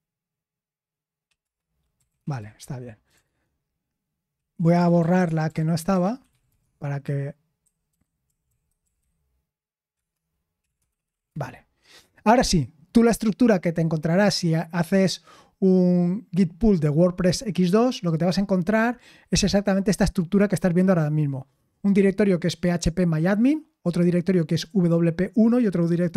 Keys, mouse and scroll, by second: 2.5-6.9 typing, 8.8-11.7 typing.